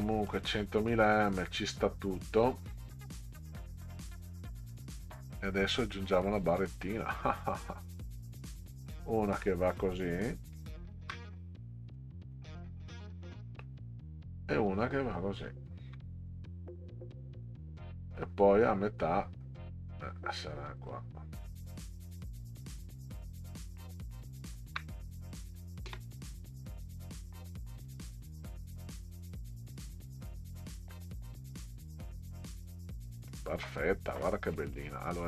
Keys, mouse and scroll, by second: 0.1 middle drag, 1.4 click, 6.4 click, 6.9 middle click, 8.3 click, 10.6 ctrl+click, 11.4 right click, 12.0 middle click, 14.5 click, 15.6 ctrl+click, 16.2 right click, 20.8 click, 24.5 ctrl+click, 25.0 right click, 25.9 space, 26.4 click, 30.4 click, 32.1 click, 33.3-33.7 middle drag, 34.6 middle click.